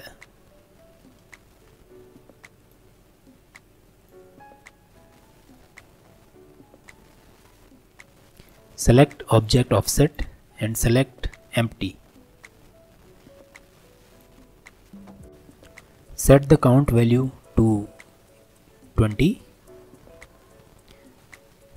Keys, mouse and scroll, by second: 2.6-4.1 drag, 8.3 click, 9.3 click, 10.0-13.8 drag, 17.2-21.7 drag.